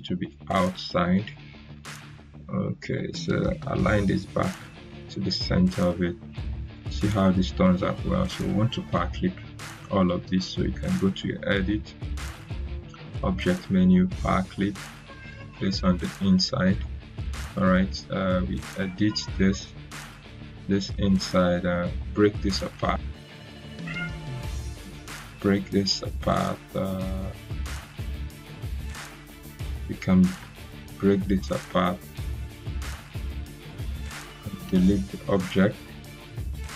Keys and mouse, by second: 1.1-4.1 drag, 10.7 click, 10.7 click, 14.7 click, 23.0 right click, 27.3 click, 29.2 click, 30.5 ctrl+k, 31.8 click, 34.5 Delete.